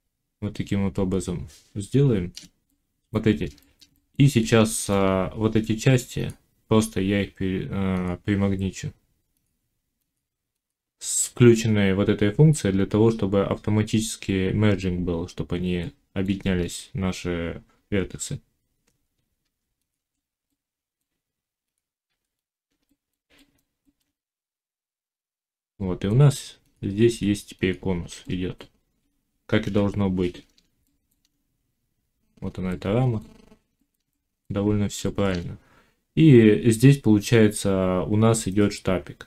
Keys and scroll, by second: 5.0 Tab, 21.9 g, 24.9 g, 27.0 g, 29.5 1.